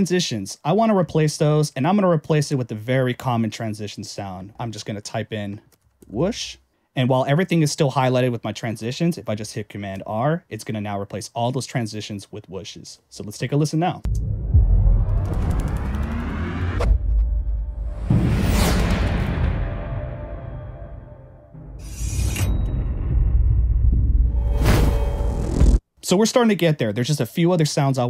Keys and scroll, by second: 9.8 super+r, 14.0 space, 25.8 space.